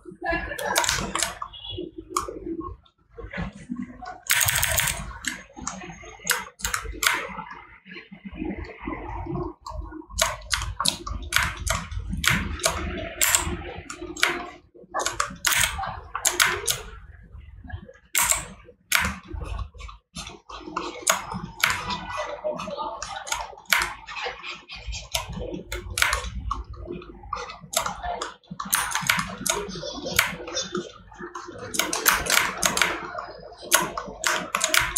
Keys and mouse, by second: 1.0 right click, 10.6 right click, 15.9 right click, 34.4 right click.